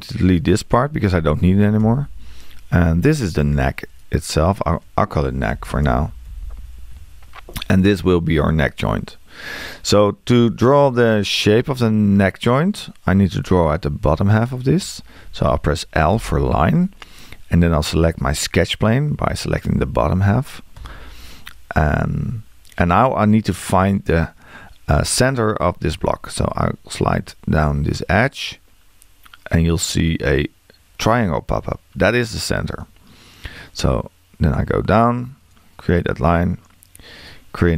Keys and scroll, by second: 1.8 BackSpace, 5.5 shift+n, 16.2 l.